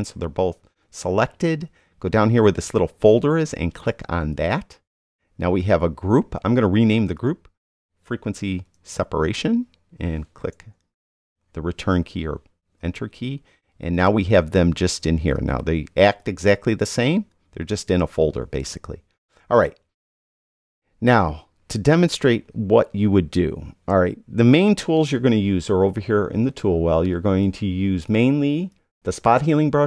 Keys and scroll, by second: 8.4 super+v, 10.9 Return.